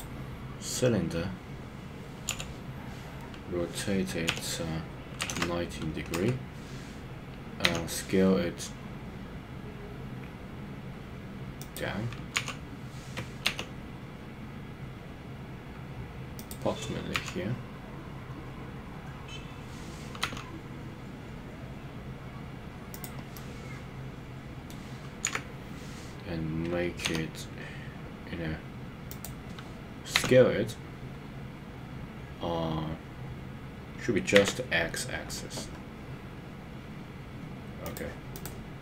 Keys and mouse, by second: 2.3 r, 4.4 y, 5.2 KP_9, 5.4 KP_0, 6.1 Return, 7.6 s, 12.4 KP_3, 13.4 g, 17.1 KP_Decimal, 20.2 s, 23.3-24.7 middle drag, 25.2 KP_1, 27.0 g, 29.1 click, 30.2 s, 34.3 x, 37.8 click.